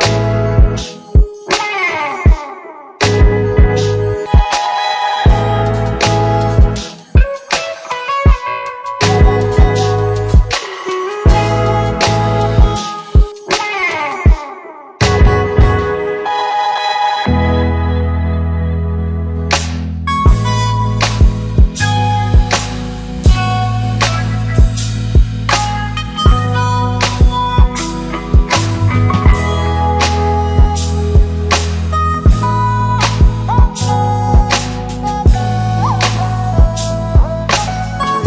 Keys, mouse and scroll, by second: 13.5 e, 13.6 e, 17.7 e, 18.4 alt+click, 23.4 Return, 34.7 click, 35.8 Return, 36.8-38.2 click.